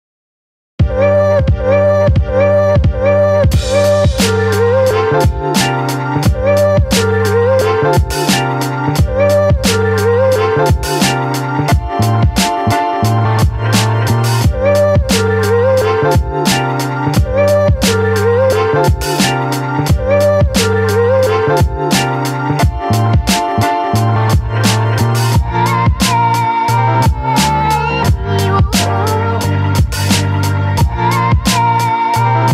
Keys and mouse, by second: 0.5-1.8 shift+middle drag, 1.8 click, 2.1 click, 2.7 click, 3.2 ctrl+z, 3.3 ctrl+z, 3.9 ctrl+z, 4.2 click, 4.6 click, 5.1 ctrl+z, 5.4 click, 6.1 click, 6.5 ctrl+z, 6.5 ctrl+z, 7.0 click, 7.5 ctrl+z, 7.8 click, 8.6 ctrl+z, 8.7 click, 9.5 click, 12.1 middle click, 12.9 middle click, 15.1 click, 15.7 click, 17.2 ctrl+z, 17.6 click, 18.4 click, 19.0 click, 19.9 ctrl+z, 20.3-21.4 drag, 21.6 ctrl+z, 22.0-23.0 drag, 23.6 click, 24.1 ctrl+z, 24.4 click, 25.0 ctrl+z, 25.9 shift+middle click, 26.6 shift+middle click, 27.1 middle click, 28.5 right click, 29.6-30.2 ], 30.2-32.5 right drag.